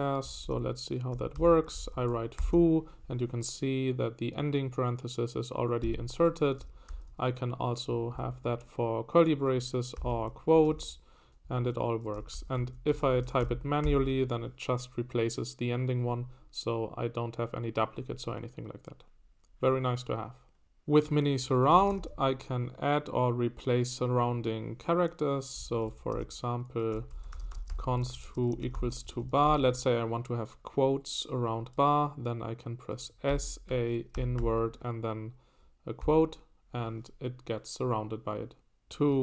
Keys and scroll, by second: 0.2-2.9 typing, 6.9 shift+[, 9.9-14.3 typing, 11.4 Escape, 21.5-22.5 typing, 25.6 Escape, 25.8-28.4 typing, 33.0-34.9 typing, 36.0 '.